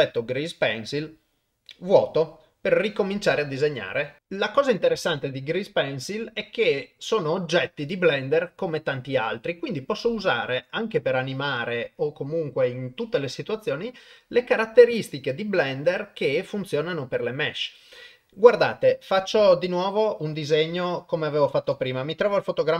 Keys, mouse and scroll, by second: 4.2 click.